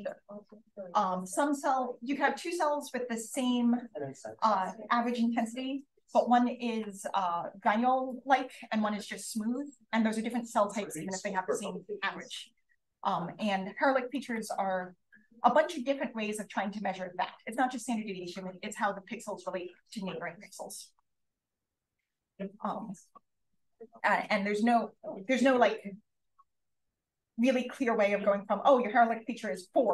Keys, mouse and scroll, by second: 14.1 click, 21.9-22.4 scroll up 1, 22.4-28.1 scroll up 1, 28.1-28.9 scroll up 1.